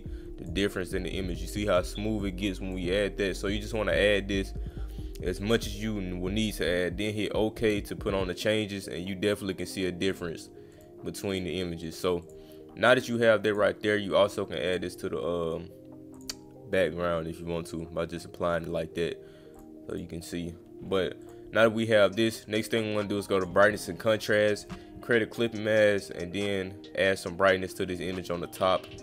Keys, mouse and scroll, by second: 0.8 click, 2.2 click, 7.0 click, 10.1 click, 10.7 click, 11.3 click, 11.8 click, 12.2 click, 13.5 click, 14.7 click, 16.1 click, 19.5 click, 19.9 click, 21.2 click, 22.5 click, 23.4 click, 24.3 click, 25.9 click.